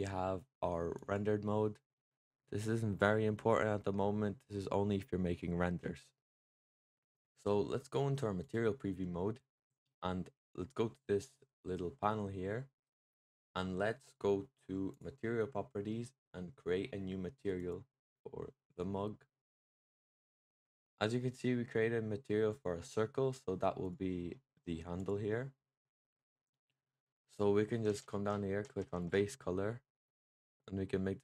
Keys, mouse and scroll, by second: 0.9 click, 1.8-7.2 middle drag, 8.3 click, 14.8 click, 17.5-20.5 drag, 23.7 click, 24.2-24.8 middle drag, 24.8 click, 25.2-27.9 middle drag, 27.9-28.9 scroll down 1, 28.9 click.